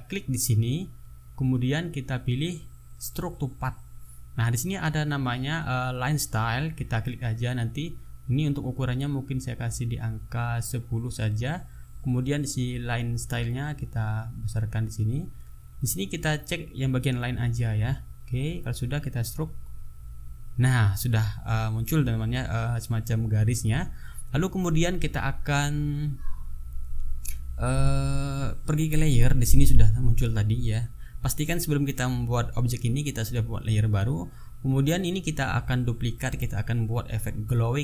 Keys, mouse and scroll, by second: 0.1 right click, 3.1 click, 5.6 click, 10.1 click, 11.0 KP_1, 11.2 KP_0, 13.6 click, 15.8 click, 17.2 click, 19.3 click, 24.6 click, 25.7 click, 28.3 click, 29.7 click, 30.5 click.